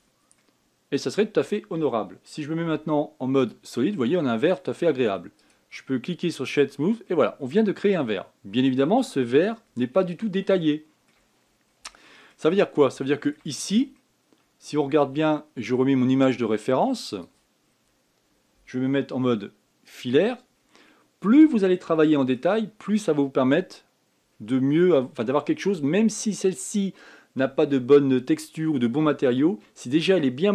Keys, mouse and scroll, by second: 0.5-1.1 drag, 1.1-2.0 middle drag, 2.0 scroll up 4, 3.4 z, 4.5 scroll down 4, 5.0 middle click, 5.3-6.1 scroll up 5, 6.1 right click, 7.5 scroll down 2, 7.8-10.1 middle drag, 10.1 KP_1, 11.3-12.1 shift+middle drag, 12.1-12.7 scroll up 5, 12.7-13.4 shift+middle drag, 13.4-13.8 scroll up 3, 13.8-14.3 shift+middle drag, 14.3-15.4 scroll up 2, 15.4-17.4 scroll up 1, 17.9 click, 18.4-19.0 scroll down 6, 19.0-19.9 scroll up 3, 19.9 z, 21.3-22.7 scroll up 3, 22.7-23.4 shift+middle drag, 23.4 scroll up 4, 24.9-26.1 scroll down 1, 30.1 scroll down 2.